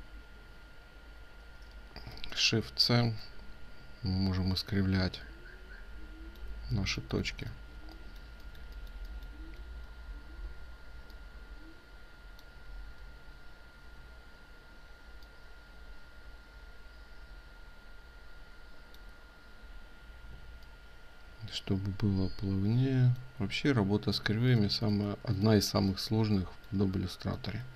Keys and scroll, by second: 6.6 ctrl+space, 24.9 ctrl+space.